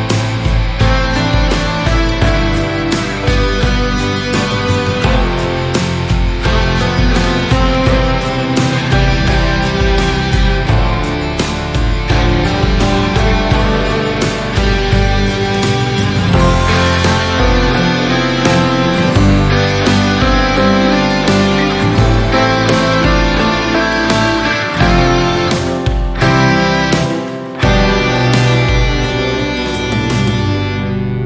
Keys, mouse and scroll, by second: 1.7 click, 3.2 s, 5.5-7.6 middle drag, 7.6 s, 9.6-11.2 middle drag, 11.2 s, 13.6 s, 17.3 Tab, 17.5 scroll down 1, 17.5-18.2 middle drag, 18.2 KP_7, 18.8 scroll down 1, 18.8-19.2 middle drag, 19.2-19.7 scroll up 1, 19.7 Tab, 19.9 scroll down 1, 20.1-21.4 middle drag, 21.4-21.8 scroll up 2, 23.3 ctrl+r, 24.0 click, 24.5 click, 25.7 click, 26.1 click, 28.3-29.9 middle drag, 29.9 Tab.